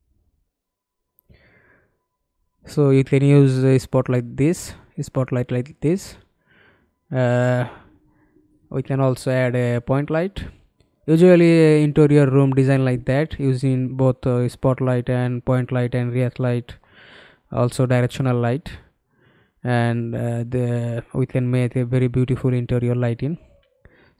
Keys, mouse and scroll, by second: 1.2 middle click, 2.2 middle click, 12.3 ctrl+space, 17.4 f, 18.1-20.2 scroll down 1, 20.2-20.6 scroll down 2, 20.8 alt+middle click, 21.7 e.